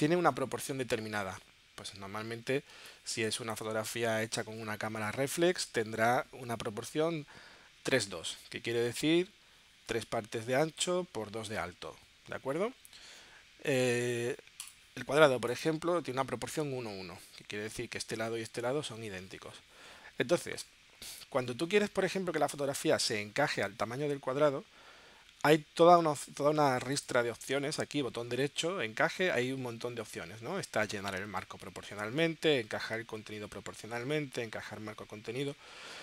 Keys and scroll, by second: 2.7 space, 3.3 space.